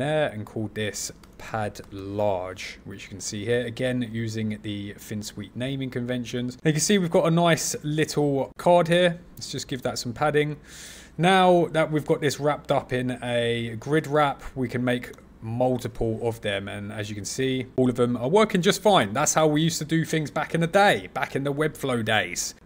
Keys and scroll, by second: 13.8 super+c, 14.0 super+v, 14.6 super+c, 15.0 super+v, 15.5 super+c, 15.7 super+v.